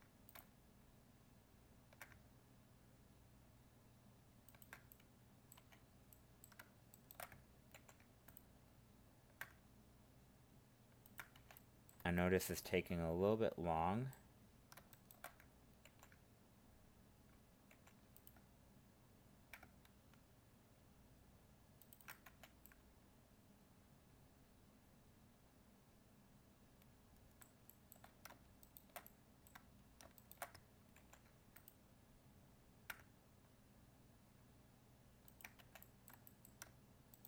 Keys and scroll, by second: 7.7 ctrl+e, 15.8 ctrl+e, 31.0 ctrl+e.